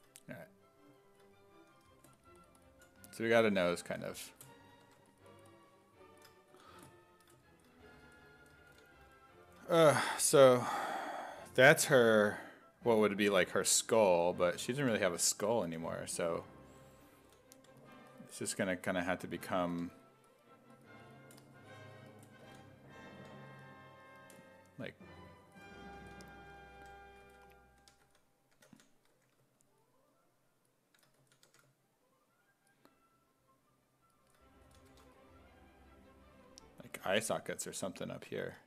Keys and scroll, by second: 1.7 s, 4.9 1, 6.5 s, 8.7 s, 10.0 s, 11.9 s, 14.1-15.7 typing, 17.3 s, 17.6 3, 19.8 1, 22.5 s, 23.2 1, 26.0-29.1 typing, 31.2 s, 31.5 1, 34.5-35.4 typing, 37.1 s, 37.4 1.